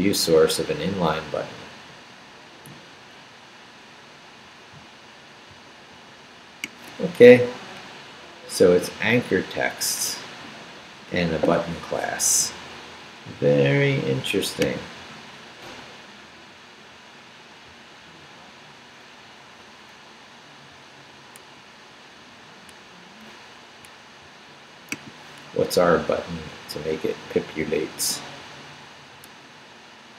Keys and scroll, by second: 25.8 Up, 27.8 Down, 28.3 Up.